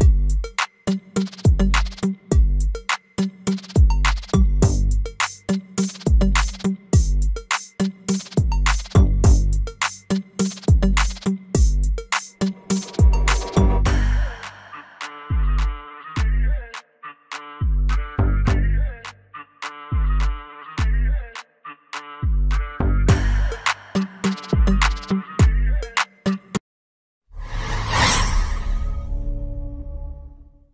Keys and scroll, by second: 8.6 ctrl+z, 14.8 F4, 22.0 ctrl+x.